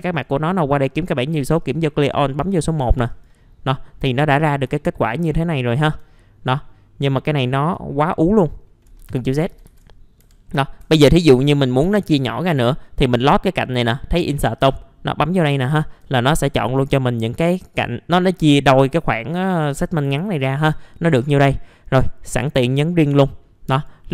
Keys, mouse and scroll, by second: 0.1 click, 3.6-3.9 scroll up 1, 4.4 scroll down 1, 4.8 alt+middle click, 7.5 alt+middle click, 8.0-8.9 scroll up 1, 9.0 ctrl+z, 9.1 ctrl+z, 9.3 ctrl+z, 9.5 ctrl+z, 9.7 ctrl+z, 10.2 F4, 10.9 2, 11.3 click, 11.9 alt+middle click, 12.4 scroll up 1, 14.6-15.7 drag, 15.7 alt+middle click, 16.9 alt+middle click, 20.3 alt+middle click, 22.6 click, 23.4-23.7 scroll up 1, 23.7 right click.